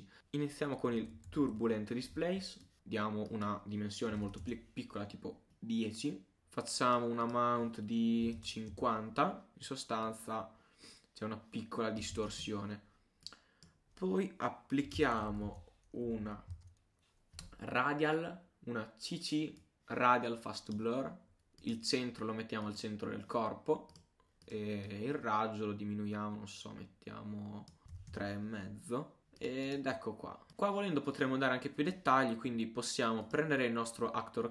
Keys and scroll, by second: 12.2 super+z.